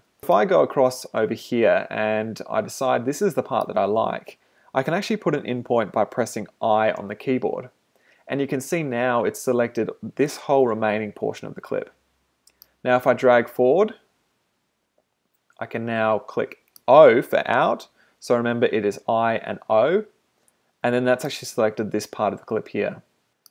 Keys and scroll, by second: 7.0 i, 18.1 o.